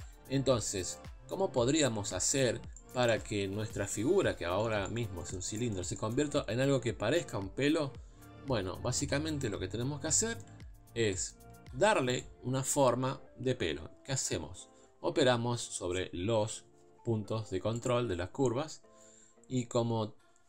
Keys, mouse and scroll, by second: 0.2 KP_7, 1.5-2.6 scroll down 2, 2.6 scroll down 2, 2.8 middle click, 3.3 Tab, 3.8 KP_Divide, 4.3 scroll down 2, 4.6-8.2 shift+middle drag, 8.2 KP_7, 8.8 KP_Divide, 9.1 Tab, 9.9 scroll down 1, 10.2 shift+middle click, 10.6-11.1 scroll up 2, 11.1-12.2 shift+middle drag, 12.2 click, 17.9-20.4 drag.